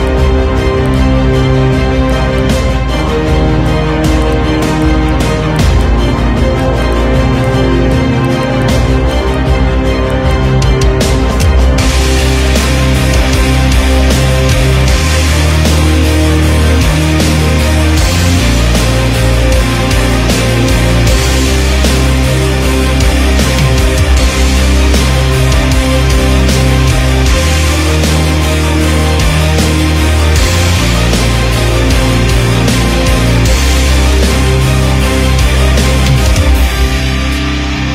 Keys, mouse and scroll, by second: 0.0 click, 0.0 scroll up 2, 0.3 Tab, 0.8 ctrl+r, 1.1 s, 2.2 Tab, 2.4-3.4 drag, 3.5 Tab, 3.7 click, 4.0 Tab, 4.2 right drag, 5.0 click, 5.8 click, 6.8 click, 7.1 Tab, 7.4 click, 7.9 click, 7.9 scroll up 1, 8.9 KP_1, 9.1 click, 9.5 middle click, 10.1 click, 10.3 alt+click, 10.6 KP_1, 10.8-11.1 scroll down 3, 11.1 click, 11.2-11.9 scroll up 4, 11.4 click, 11.9 alt+z, 12.0 click, 12.6 g, 13.0 Tab, 13.3 alt+z, 13.4 click, 13.8 ctrl+z, 14.0 ctrl+z, 14.2 Tab, 14.4 alt+click, 14.6 scroll down 1, 14.8 click, 15.2 shift+click, 15.4 ctrl+z, 15.5 shift+click, 15.6 scroll down 1, 15.8 click, 16.6 click, 17.2 shift+click, 17.4 click, 17.8 ctrl+b, 18.6 Tab, 18.9 scroll down 2, 18.9 KP_1, 19.0 click, 19.2 click, 19.4-20.0 scroll up 5, 19.6 click, 20.2 ctrl+z, 20.6 ctrl+z, 20.8 Tab, 20.8 click, 21.0 Tab, 21.2 alt+click, 21.8 alt+z, 22.4 click, 22.7 alt+click, 23.0 scroll down 1, 23.4 Tab, 23.5 KP_1, 23.6-24.0 scroll down 4, 24.0 click, 24.2 KP_1, 24.4 alt+z, 24.6 click, 25.2 drag, 25.4 shift+click, 25.8 ctrl+l, 26.6 Delete, 26.7 click, 27.2 shift+d, 28.0 alt+z, 28.3 click, 28.3-28.7 scroll up 1, 30.1 click, 30.4 click, 30.8-32.2 drag, 34.1-35.9 drag, 36.1 click, 36.2 scroll down 2, 36.4 drag, 36.9 KP_3, 37.1 scroll up 2, 37.3 KP_1, 37.4-37.8 scroll down 2.